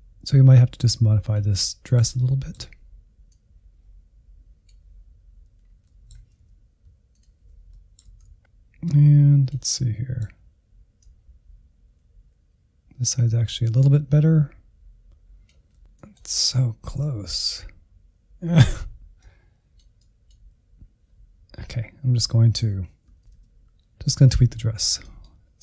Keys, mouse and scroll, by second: 0.5 middle click, 1.1 click, 1.8 scroll down 1, 1.9 middle click, 2.0 alt+z, 2.3 ctrl+click, 2.5 middle click, 2.6 alt+z, 2.7 scroll up 1, 2.8 middle click, 3.1-4.2 drag, 4.2-4.5 scroll down 3, 4.5-6.3 drag, 6.3 Down, 6.9 Left, 7.1-7.4 Right, 7.5 Left, 7.6 click, 7.9 Right, 7.9 Right, 8.0 Right, 8.2 click, 8.9 middle click, 9.5-11.3 drag, 11.3 middle click, 11.8-13.0 drag, 13.1 scroll down 2, 13.2 middle click, 13.3 alt+z, 13.9 ctrl+click, 14.1 middle click, 14.6 ctrl+click, 14.8 alt+z, 14.9 scroll up 5, 15.1 middle click, 15.4-19.9 drag, 19.9-21.5 scroll down 1, 21.9-23.2 Right, 23.4 Right, 24.9-25.6 drag.